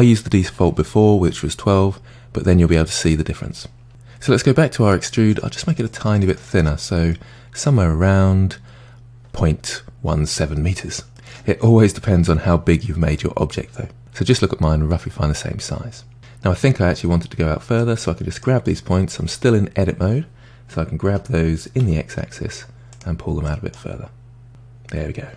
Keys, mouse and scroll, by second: 5.3-6.8 drag, 7.1-10.1 middle drag, 11.1-14.0 middle drag, 16.2-16.5 scroll down 2, 17.8 drag, 21.1 g, 23.5 click, 24.5-25.3 middle drag.